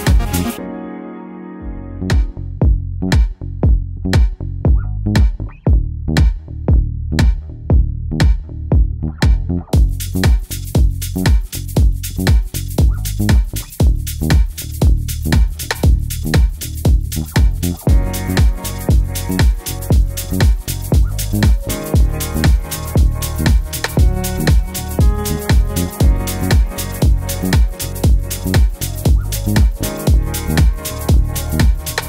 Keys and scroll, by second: 11.9 5, 13.5 super+d, 13.7-14.0 Right, 15.8 Left.